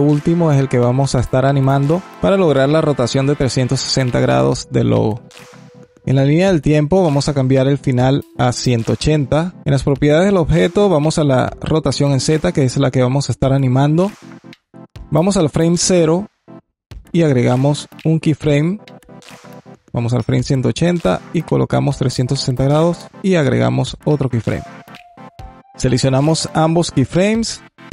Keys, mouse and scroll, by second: 5.8-6.9 alt+middle drag, 6.9-9.5 drag, 11.3-14.6 drag, 15.0-17.5 drag, 17.8 click, 19.3-22.7 drag, 23.7 click, 26.1-27.9 drag.